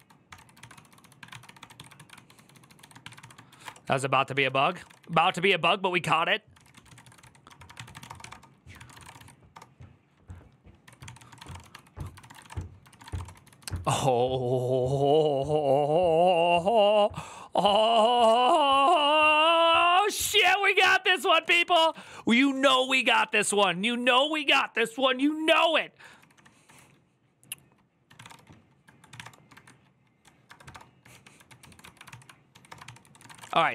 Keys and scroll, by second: 0.0-9.4 typing, 10.6 Tab, 10.8 ctrl+c, 10.9-14.0 typing, 20.9-24.0 typing, 25.8-33.7 typing.